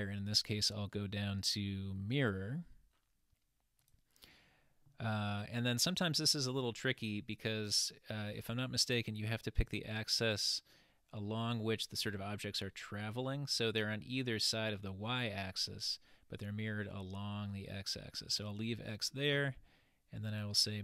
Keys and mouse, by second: 20.4 click.